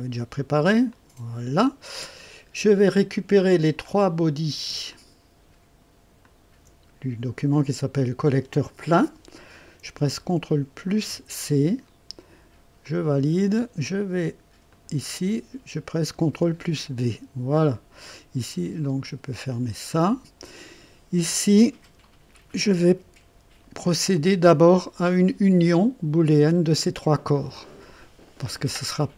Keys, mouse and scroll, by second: 0.8 click, 2.1 click, 3.8 click, 4.8 ctrl+click, 6.2 ctrl+click, 10.9 ctrl+c, 12.8 click, 14.6 click, 16.2 ctrl+v, 18.8 click, 19.9-20.8 drag, 21.8 2, 22.8 1, 24.7 right click.